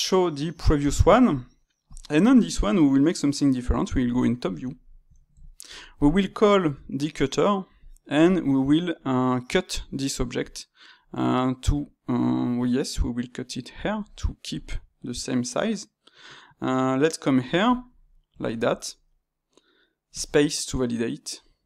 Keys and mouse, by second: 0.5-3.9 drag, 3.9 KP_7, 4.6-6.5 shift+middle drag, 6.5 space, 17.9-21.6 middle drag.